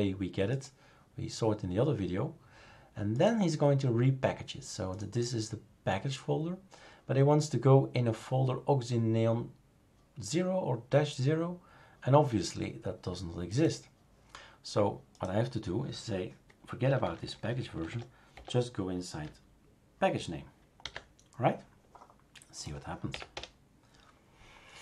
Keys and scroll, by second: 16.8 Delete, 17.0 Delete, 17.2 Delete, 17.4 Delete, 17.5 Delete, 17.7 Delete, 17.9 Delete, 18.3 Delete, 20.8 ctrl+s, 23.1 Up, 23.3 Return.